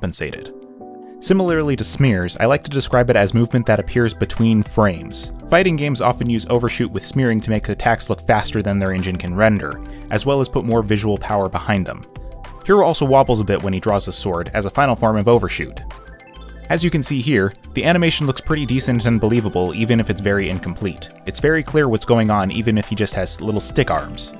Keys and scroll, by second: 3.5 ctrl+t, 8.1 Return.